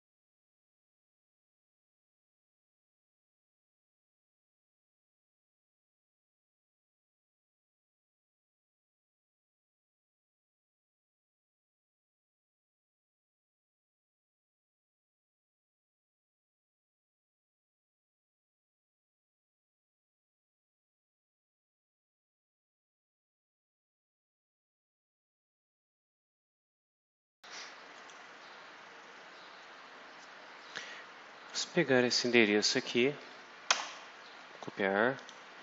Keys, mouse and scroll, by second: 0.0 click, 0.1 click, 0.4 middle click, 0.7 click, 0.7 middle click, 1.0 click, 1.2 BackSpace, 1.5 F5, 4.1 click, 4.3 Return, 4.4-6.3 typing, 6.4 click, 6.6 click, 6.8 click, 7.0 click, 8.2 Up, 8.5 Down, 8.5-11.0 typing, 11.6 Down, 12.0 shift+End, 12.1 ctrl+shift+x, 12.4 ctrl+shift+v, 12.6 Up, 13.0-13.9 typing, 14.2 alt+click, 14.9 click, 15.6 click, 15.7 ctrl+c, 15.8 alt+Tab, 16.1 ctrl+click, 16.2 ctrl+v, 16.8-18.3 scroll down 8, 18.7 ctrl+f, 18.8 ctrl+p, 18.9 ctrl+t, 19.2 click, 19.4 ctrl+f, 19.5 ctrl+o, 19.6 ctrl+shift+t, 19.8 ctrl+shift+Return, 20.0 click, 20.4 ctrl+f, 21.0 KP_Enter, 21.2 ctrl+f, 21.3 ctrl+Return, 21.6 click, 21.6 ctrl+f, 21.7 ctrl+Return, 22.6 click, 23.0 click, 23.3 ctrl+c, 23.4 ctrl+alt+Tab, 23.8-25.0 typing, 23.8 click, 24.6 click, 24.8 shift+Down, 25.6 ctrl+s, 26.3 click, 26.7 click, 27.8 click, 30.4 scroll up 2, 31.4 click, 33.6 ctrl+c, 35.1 click.